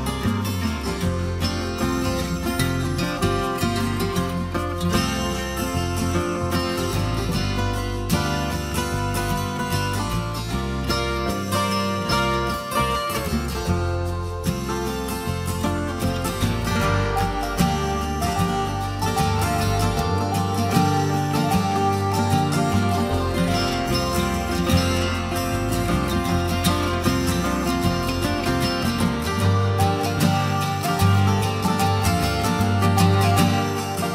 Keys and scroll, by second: 20.7 ctrl+t, 25.3 Return.